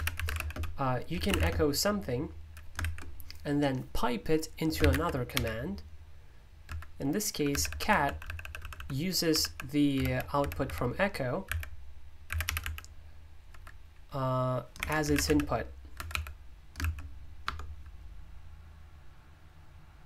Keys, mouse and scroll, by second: 0.0-3.3 typing, 4.5-17.4 typing.